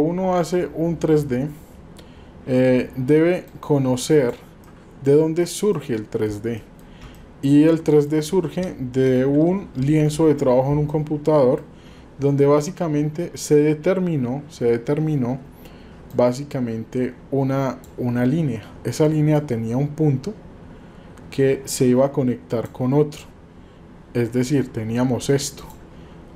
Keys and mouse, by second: 3.6 click, 4.6-5.4 middle drag, 5.8-6.8 middle drag, 7.1-8.1 drag, 9.2 KP_7, 11.0-11.6 shift+drag, 16.2-17.9 drag, 19.5-22.7 drag.